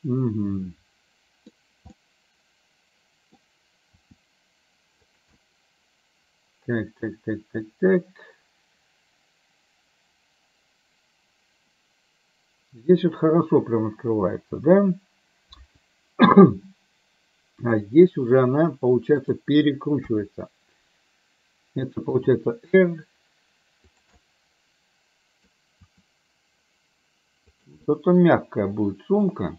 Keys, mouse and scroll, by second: 2.1-3.3 middle drag, 4.1 r, 5.5-18.1 middle drag, 19.3 click, 20.2 KP_1, 22.2 r, 24.2-25.5 middle drag, 25.9 r, 27.8-29.2 middle drag.